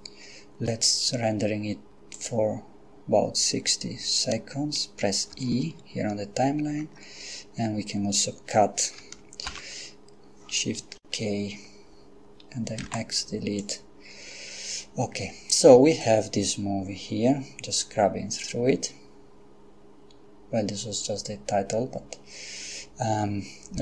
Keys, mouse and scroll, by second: 2.2 click, 5.3 e, 9.5 shift+k, 12.8 x, 13.6 click, 16.0-23.8 drag.